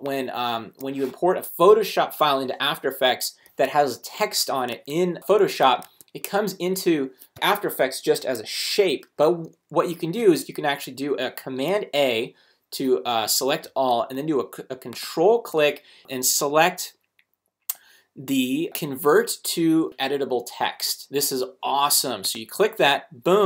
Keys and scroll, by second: 4.7 super+Tab, 5.8 super+Tab, 8.2 shift+super+a, 10.2 super+a.